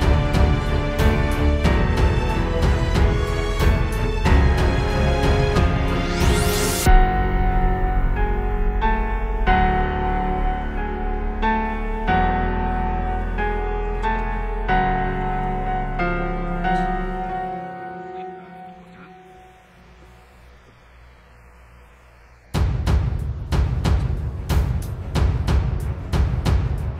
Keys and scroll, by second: 8.6 space, 8.8 super+z, 9.7 space, 10.4 super+space, 12.0 super+z, 12.2 space, 12.7 alt+super+space, 14.7 space, 25.4 space, 26.0 space.